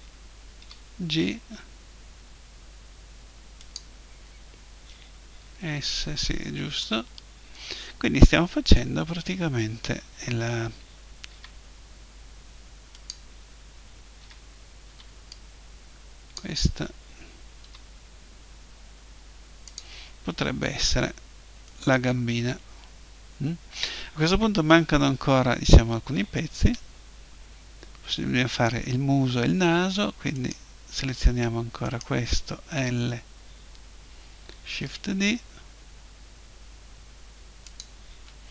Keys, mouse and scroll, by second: 0.6 g, 3.7-5.4 drag, 5.4 KP_7, 6.7 KP_1, 11.3 s, 13.1-14.2 drag, 14.2 a, 14.9 b, 17.7 g, 20.9 click, 21.7-23.4 middle drag, 26.6 KP_1, 30.3-33.8 right drag, 32.7 l, 33.7-36.0 middle drag, 34.7 shift+d, 37.8-38.5 drag.